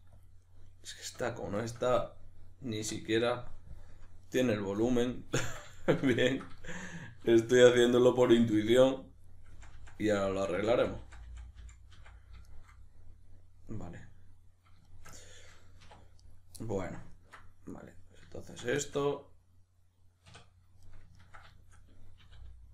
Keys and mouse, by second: 0.3 click, 0.5-7.7 middle drag, 2.9 \, 3.9 KP_Decimal, 7.5 2, 7.7 right click, 8.6 f, 9.3 right drag, 9.5 f, 12.5-16.2 shift+middle drag, 15.8 1, 16.2 right drag, 16.6-17.7 middle drag, 17.7 right drag, 18.4 ctrl+right click, 18.8-22.7 shift+middle drag, 20.3 \, 22.2 e.